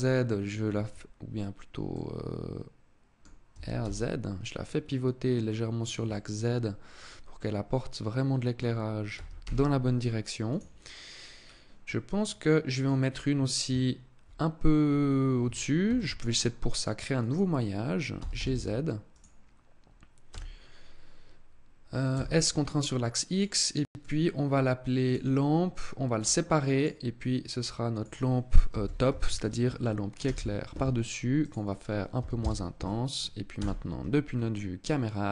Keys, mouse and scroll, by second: 1.6 middle click, 3.2 r, 5.5 click, 5.7 middle click, 8.8 r, 10.2 click, 11.1 scroll down 1, 11.5 middle click, 15.5 shift+a, 17.9 g, 18.9 click, 19.9 s, 23.0 click, 23.5 click, 25.7 click, 31.0 click, 33.1 KP_0, 33.9 scroll up 4, 35.1 click.